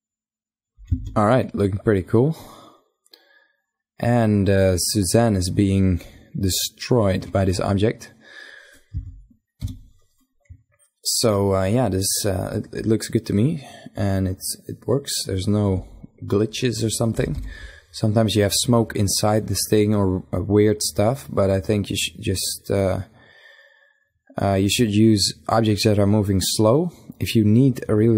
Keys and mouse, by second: 0.3 alt+a, 7.4 z, 8.4 KP_5, 12.4 middle click, 14.0 middle click, 14.6-15.6 middle drag, 15.2 z, 15.8 middle click, 15.9 KP_1, 16.6 KP_5.